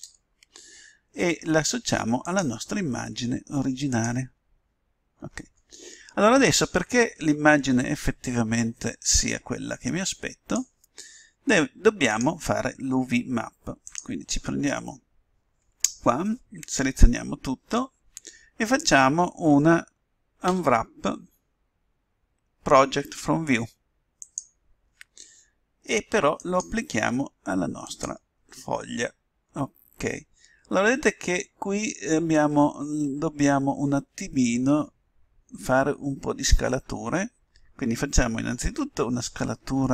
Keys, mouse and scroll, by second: 2.2-3.9 drag, 9.2-11.0 drag, 12.0-13.9 drag, 17.2 a, 17.6 a, 20.4 u, 26.3-28.0 drag, 30.4-39.4 middle drag, 39.4 s.